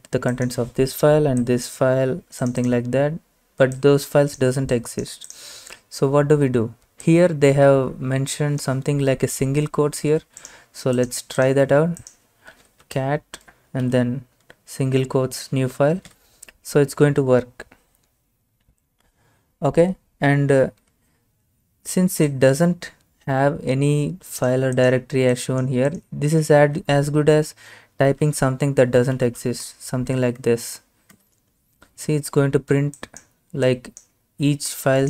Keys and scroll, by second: 12.4-13.9 typing, 13.9 ctrl+v, 16.1 Return, 26.3-27.3 typing, 29.0-29.7 typing, 30.2 Tab, 31.1 Return.